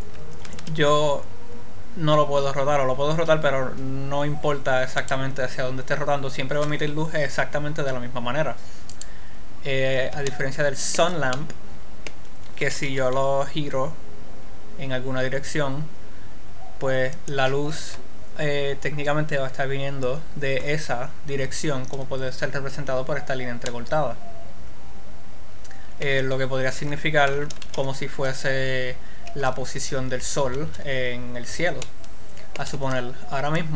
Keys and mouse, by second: 0.9 r, 5.7-7.4 right drag, 9.4-11.0 right drag, 11.0 middle click, 13.1 r, 19.5 click, 24.1-25.9 drag, 28.1 alt+r.